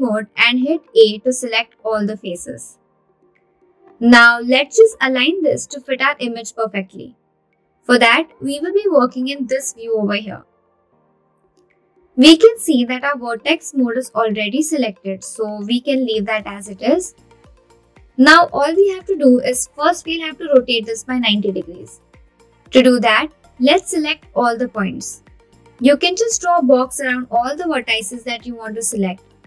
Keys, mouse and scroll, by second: 3.0 Tab, 4.8 click, 5.9 a, 9.2-10.7 scroll down 6, 10.7-11.2 scroll down 1, 11.2-13.0 scroll up 1, 25.6 click.